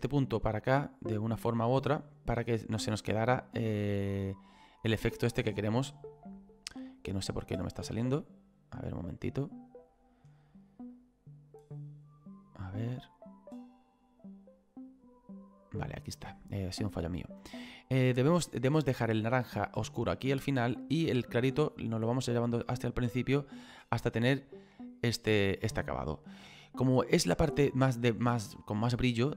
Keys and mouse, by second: 0.4 click, 2.0 click, 4.0 middle click, 5.6 click, 7.8 click, 9.0 middle click, 10.9 click, 13.8 click, 20.8 click.